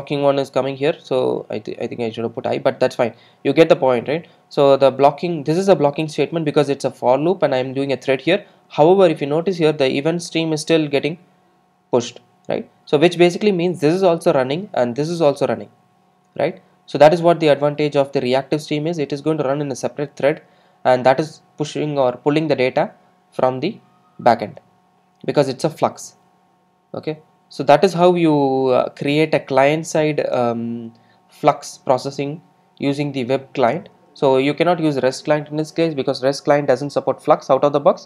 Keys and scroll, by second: 28.7 super+F2.